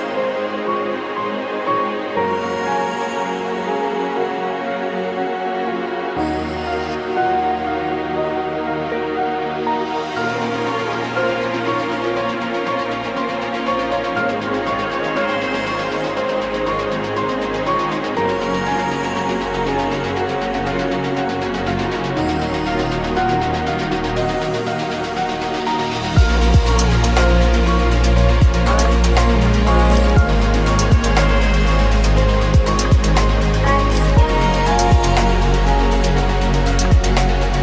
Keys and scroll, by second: 17.7 Delete, 20.3 Delete, 31.5 KP_Add.